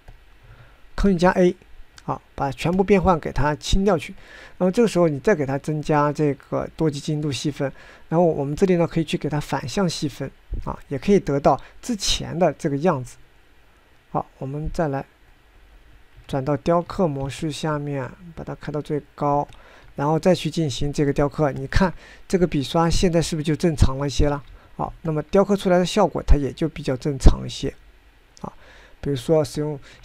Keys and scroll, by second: 0.5 ctrl+z, 2.2 ctrl+a, 17.5 ctrl+Tab, 18.0 ctrl+Tab, 18.1 ctrl+Tab, 18.1 ctrl+Tab, 25.5 ctrl+z.